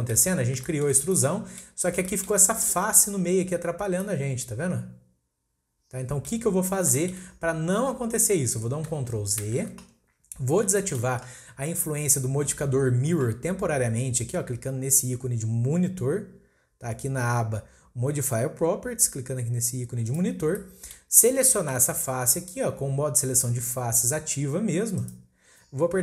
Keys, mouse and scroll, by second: 0.3 scroll up 2, 0.6-1.8 shift+middle drag, 1.8-3.7 scroll up 3, 2.0 shift+middle drag, 3.7 scroll down 1, 4.0-6.5 middle drag, 6.5-7.0 scroll down 4, 7.0 shift+middle click, 7.9-8.6 scroll down 1, 8.6-9.4 scroll up 2, 9.4 ctrl+z, 10.3-10.7 scroll down 1, 10.7-13.8 shift+middle drag, 20.1 click, 20.5 scroll down 1, 20.6-24.5 middle drag, 25.0 click.